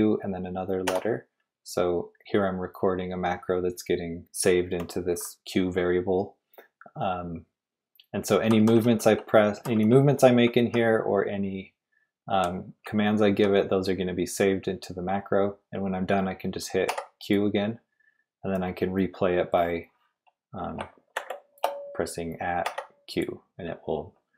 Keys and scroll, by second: 0.8 typing, 8.2-11.4 typing, 12.6-14.3 typing, 16.9 typing, 21.1 shift+2, 22.6 q.